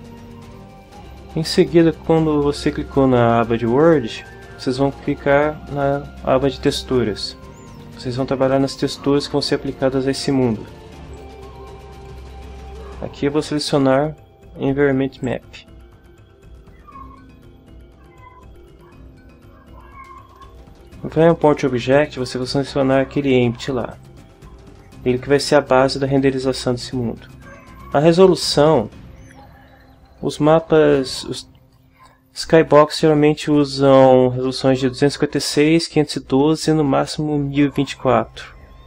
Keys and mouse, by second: 6.7 click, 11.1 click, 11.4-13.5 middle drag, 13.5 click, 15.2 click, 15.5-16.6 middle drag, 21.9 click, 23.9 click.